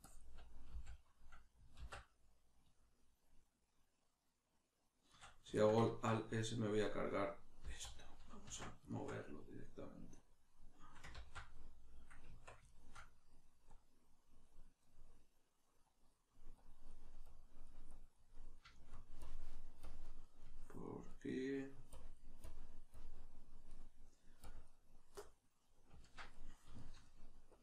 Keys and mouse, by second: 5.2 right click, 5.5-10.2 ctrl+shift+middle drag, 7.6 z, 10.2-11.5 drag, 11.2 ctrl+z, 11.5-13.7 middle drag, 12.2 Tab, 13.7-14.8 drag, 14.8-15.8 middle drag, 15.8-18.3 drag, 18.3 middle click, 19.3-20.3 drag, 20.3-21.9 middle drag, 21.9-23.7 drag, 23.7 middle click, 24.5 click, 25.1-27.5 middle drag, 27.5-27.6 drag.